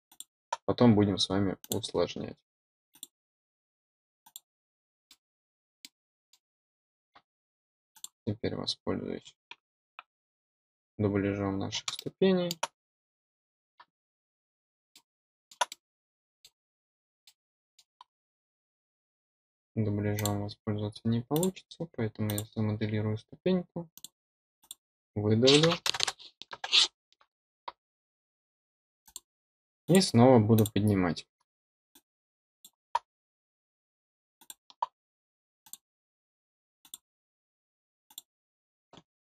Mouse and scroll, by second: 0.0 click, 1.5 click, 2.8 click, 4.2 click, 5.0 middle click, 5.7 middle click, 7.9 click, 14.8 middle click, 15.6-16.4 middle drag, 16.4-16.7 scroll down 4, 17.2-17.7 middle drag, 17.9-18.2 scroll up 4, 20.1 click, 21.3 click, 22.2 click, 23.9 click, 24.5 click, 29.0 click, 29.8 click, 30.5 click, 31.8-32.6 drag, 34.3 click, 35.6 click, 36.7 click, 38.0 click.